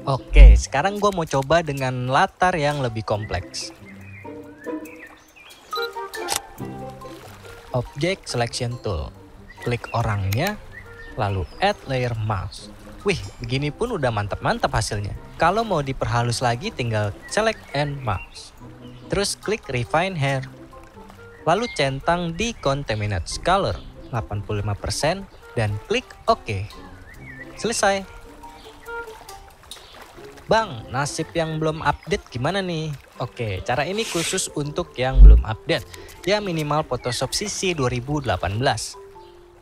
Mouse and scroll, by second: 27.1-28.4 drag, 28.5 click, 29.0 click.